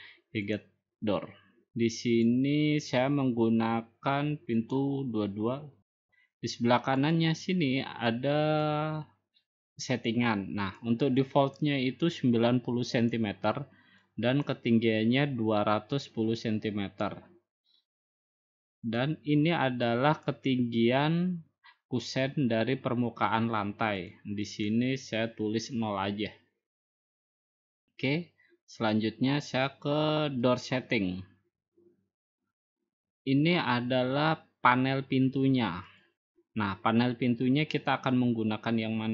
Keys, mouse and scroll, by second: 3.4-4.4 drag, 5.5-6.6 drag, 7.9 click, 9.5 click, 11.6 click, 12.5 click, 13.9 click, 14.5 click, 15.3-16.4 drag, 19.8-21.0 drag, 24.9 click, 25.5 click, 27.1 0, 31.4 click, 36.8 click, 37.9 middle click, 38.1 middle click, 38.2-39.1 scroll up 3.